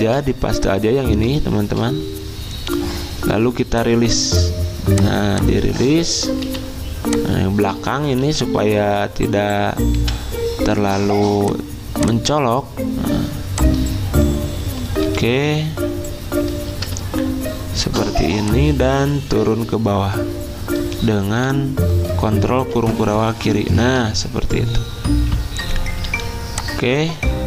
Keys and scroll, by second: 6.4 Delete, 8.0-9.9 typing, 14.7 ., 15.1 /, 17.9 v, 21.5 Right, 22.7 ctrl+[, 26.1 i.